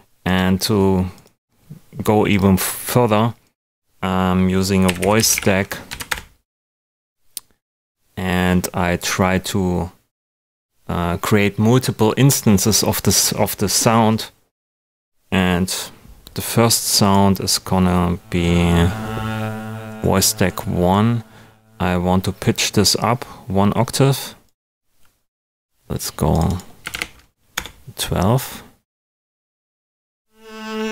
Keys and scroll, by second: 26.6-27.4 typing, 27.5 Return.